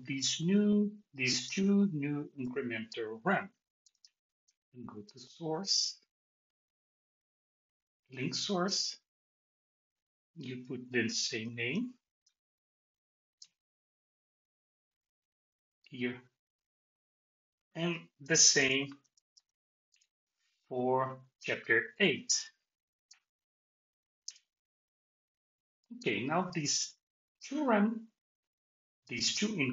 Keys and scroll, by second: 13.3 BackSpace, 19.9 Return, 24.2 Return.